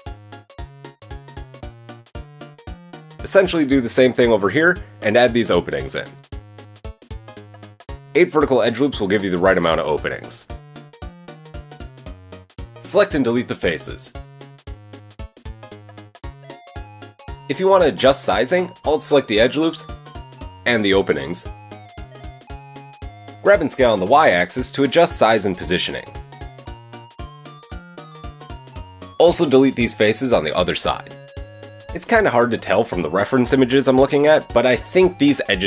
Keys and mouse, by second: 2.5 Tab, 2.8 KP_3, 3.2 ctrl+r, 3.8 Tab, 3.8-11.6 middle drag, 4.2 Tab, 4.7 g, 6.7 ctrl+r, 7.7 ctrl+r, 11.6-13.7 drag, 13.1 shift+middle click, 13.1 shift+right click, 13.9 shift+click, 15.0 x, 16.4 Tab, 16.8-18.7 shift+drag, 16.9 Tab, 17.1 KP_1, 17.1 KP_3, 18.7 middle click, 19.6 alt+shift+click, 20.1-21.6 middle drag, 22.4 KP_3, 23.6 g, 25.7 Tab, 26.7 Tab, 27.5 g, 28.7 Tab, 29.1 click, 29.4 shift+click, 29.8 shift+click, 31.1 shift+click, 32.5-32.9 shift+drag, 33.0 shift+click, 33.8-35.6 shift+drag, 34.4 x.